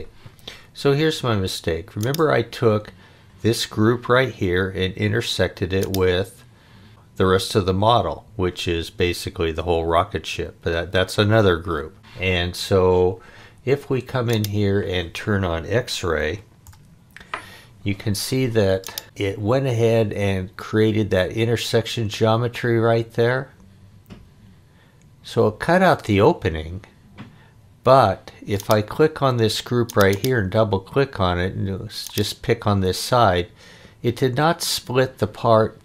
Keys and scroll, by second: 16.2 x, 16.6 Return.